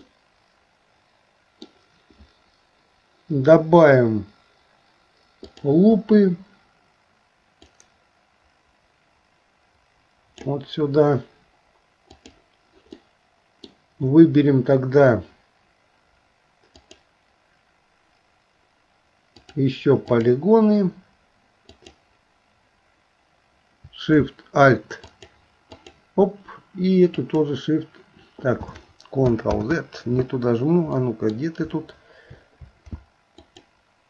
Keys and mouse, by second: 0.1-1.7 middle drag, 5.6 click, 7.7-10.5 drag, 12.2 click, 13.1 middle click, 16.8 click, 19.6 click, 21.7 click, 25.0 alt+shift+click, 25.7 alt+shift+click, 27.3 alt+shift+click, 29.6 ctrl+z, 31.0 middle click, 33.4 alt+shift+click.